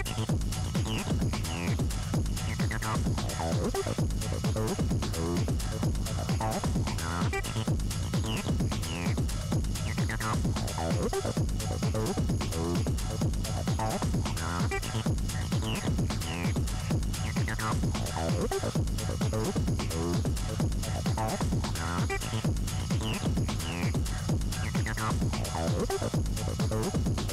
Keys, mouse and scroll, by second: 0.5 shift+middle click, 1.0-1.5 scroll up 1, 1.5 scroll down 1, 2.0 middle click, 2.8-3.4 scroll up 1, 3.5 scroll down 2, 3.9 a, 4.7 a, 6.4 Tab, 7.6 n, 8.4 Tab, 9.6 scroll down 4, 10.5 Tab, 10.7 scroll up 4, 11.8-12.1 scroll down 3, 13.7 Left, 15.1-16.1 middle drag, 16.1 click, 16.8 n, 21.7 scroll down 6, 21.9 middle click, 22.9 click, 23.6 scroll down 3, 26.6 scroll up 3, 27.0-27.3 middle drag.